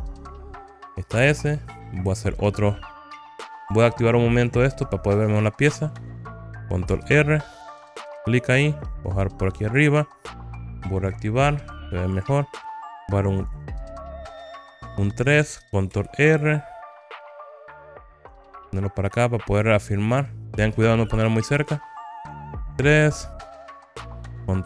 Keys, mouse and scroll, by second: 0.4 click, 2.2 click, 4.6 click, 7.0 ctrl+r, 10.0 click, 11.4 click, 12.2 click, 13.5 click, 14.3 3, 14.7 click, 16.0 ctrl+r, 21.2 click, 23.4 3, 24.1 click.